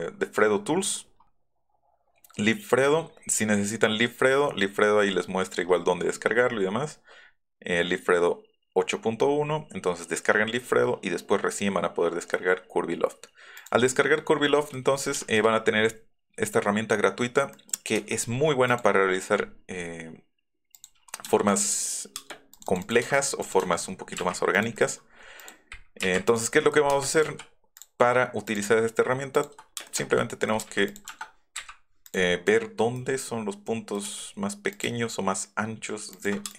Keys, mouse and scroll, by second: 0.5 Down, 1.1 scroll down 1, 3.2 scroll up 1, 4.5-5.0 scroll down 2, 6.3-6.9 scroll down 1, 6.9 scroll up 1, 9.4-9.8 scroll up 2, 13.6 click, 14.5 click, 15.0 shift+click, 17.6 middle click, 18.0 c, 18.2 scroll up 1, 18.7 click, 19.1-19.9 scroll up 3, 20.8 click, 22.3 middle click, 22.3 space, 22.6 click, 23.5 click, 24.6 click, 24.8 click, 25.4 click, 26.0 Up, 26.3 click, 26.6 click, 26.9 middle click, 26.9 space, 27.3 s, 27.8 click, 28.5 click, 29.4 ctrl+click, 29.8 space, 30.6 middle click, 30.9 click, 31.6 Up, 32.1 click, 32.5 click, 33.0 middle click, 34.0 middle click, 34.1 s, 34.8 click, 36.2 ctrl+click.